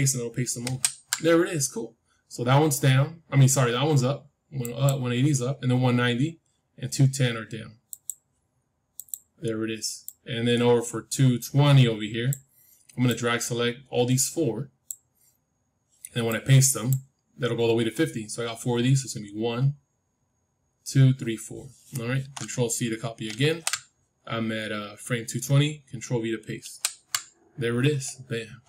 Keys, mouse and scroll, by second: 0.5 ctrl+v, 4.6-6.5 drag, 7.8-12.2 drag, 13.0-15.7 drag, 16.2-18.2 drag, 23.2 ctrl+c, 26.5 ctrl+v.